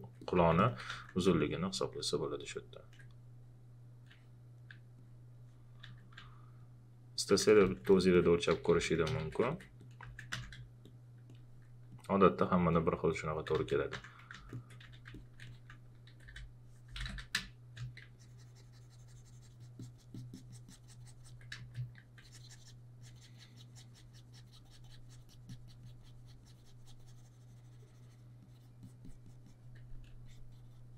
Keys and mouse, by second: 0.9 w, 1.4 alt+click, 5.0 click, 5.6-7.3 typing, 6.6 click, 7.6 ctrl+a, 7.6 ctrl+click, 8.5 shift+f, 9.1 ctrl+z, 9.5 alt+click, 10.3 w, 10.8 alt+click, 13.7-14.8 typing, 14.5 ctrl+click, 15.1 alt+click, 16.1-17.5 typing, 17.4 click, 21.5 space, 21.9 click.